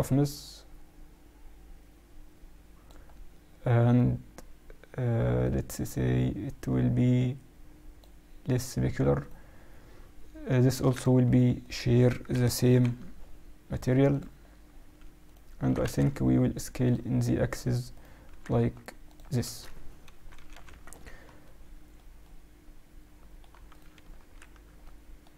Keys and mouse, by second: 1.0 click, 5.4-7.1 drag, 9.1-11.1 right drag, 11.6-13.5 right drag, 12.6 ctrl+l, 15.2-17.0 right drag, 15.6 s, 17.4-19.7 right drag, 18.2 s, 19.5 z, 20.0 KP_Subtract, 20.6 z, 21.4 middle click, 23.6 middle click, 23.6-25.3 right drag, 24.1 ctrl+1.